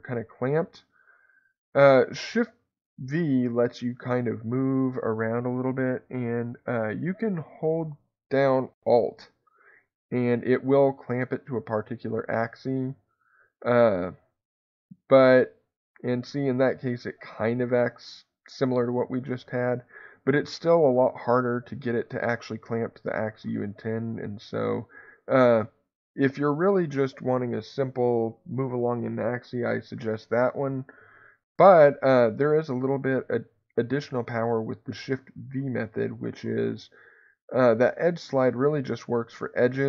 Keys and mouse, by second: 31.5 Escape, 37.8 click.